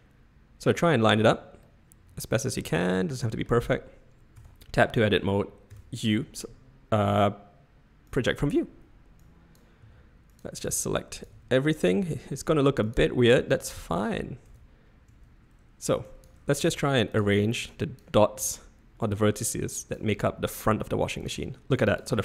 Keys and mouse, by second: 1.7-3.6 middle drag, 4.4 Tab, 5.7 u, 9.2-9.7 drag, 9.8 g, 10.6 s, 11.3 g, 11.9 s, 13.0 g, 14.4 Tab, 15.1 Tab, 16.1 click, 16.6 g, 17.7 drag, 18.5 g, 19.8 click, 20.0 g.